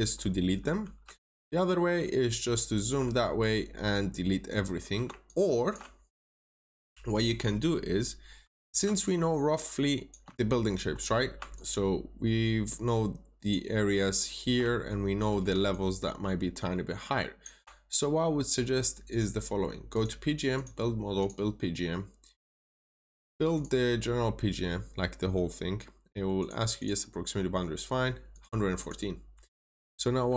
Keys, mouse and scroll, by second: 1.2 ctrl+shift+click, 3.1 scroll up 1, 4.4-4.9 scroll down 1, 5.1 ctrl+shift+click, 6.5 click, 7.8 scroll down 1, 8.5-8.9 scroll up 1, 8.9 ctrl+shift+click, 10.9-11.3 scroll up 1, 11.5 ctrl+shift+click, 14.8 middle click, 15.6 ctrl+shift+click, 19.0 click, 26.7 double click, 28.2 click, 28.7 double click.